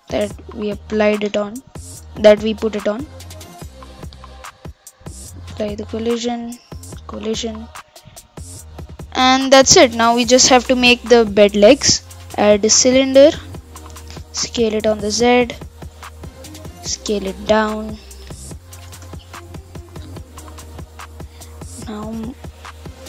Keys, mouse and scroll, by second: 0.2 ctrl+a, 1.0 click, 1.4 ctrl+a, 2.2 ctrl+a, 3.5 ctrl+z, 4.9 ctrl+a, 6.2 click, 7.0 ctrl+a, 7.5 scroll down 4, 7.7 scroll up 4, 8.0-9.6 middle drag, 9.6 click, 10.3 KP_1, 11.8 shift+a, 14.2 s, 16.1-17.3 scroll down 9, 17.3 s, 19.1-19.6 scroll up 6, 19.6-20.1 shift+middle drag, 20.1 s, 21.3 g.